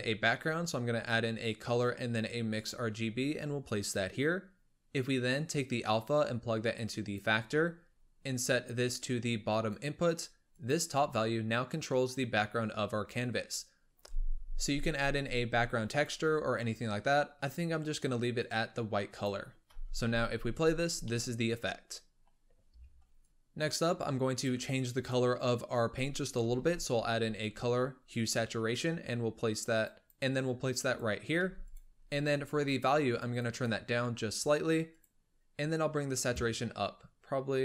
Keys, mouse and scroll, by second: 5.2 click, 7.5-8.9 scroll up 5, 8.9 click, 10.4 click, 13.2-13.8 scroll down 1, 13.8 click, 15.3 click, 16.6-17.3 scroll up 2, 17.3 click, 19.7 space, 21.0-23.2 middle drag, 23.2 click, 23.3 middle click, 23.7 click, 26.4 shift+a, 31.3 g, 32.0-33.0 scroll up 3, 33.0-37.6 drag.